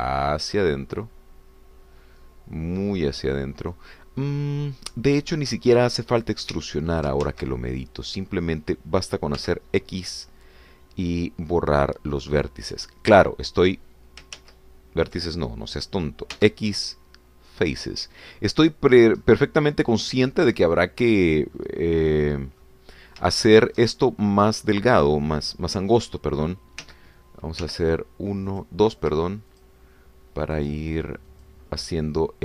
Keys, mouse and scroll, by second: 7.5 Escape, 8.3 ctrl+z, 9.0 click, 10.4 x, 13.4 click, 15.4 ctrl+z, 17.4 x, 18.6 click, 19.9 scroll down 1, 20.2-21.7 middle drag, 22.6-23.9 middle drag, 23.9 scroll up 1, 24.4 shift+middle click, 28.3 1, 28.6 2, 29.5 click, 30.5 shift+click, 31.6 shift+click.